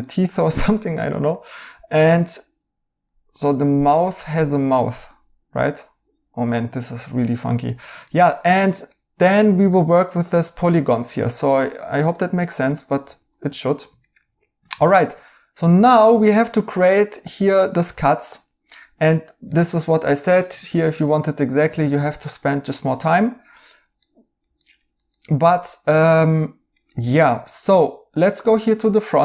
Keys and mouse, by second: 0.0 right click, 7.0 right click, 11.9 right click, 12.6 2, 13.5 right click, 18.6 right click, 24.0 right click, 28.6 right click.